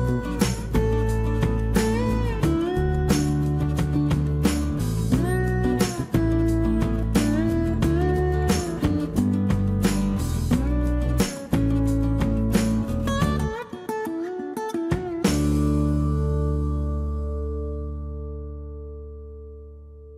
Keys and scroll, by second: 0.1 Escape, 12.9 t, 16.8-19.0 typing, 19.1 Return, 19.4 Return.